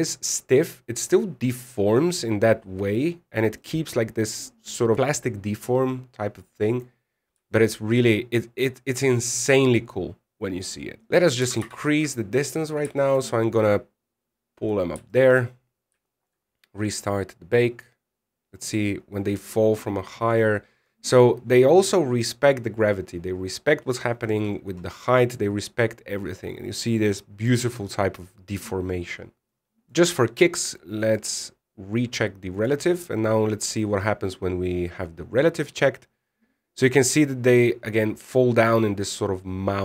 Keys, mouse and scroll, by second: 4.3 middle click, 7.8 scroll down 2, 8.2 shift+middle click, 8.5 scroll down 1, 11.1 click, 11.5 right click, 12.1 g, 13.7 shift+middle click, 13.9 scroll up 1, 14.2 scroll down 1, 15.3 click, 15.9 shift+middle click, 16.8 shift+middle click, 17.2-17.7 scroll up 1, 21.1 middle click, 25.6 middle click, 26.4 middle click, 29.8 middle click, 30.5 click, 31.7 click, 33.3 click, 34.5-34.9 scroll down 2, 34.9-36.3 scroll up 1.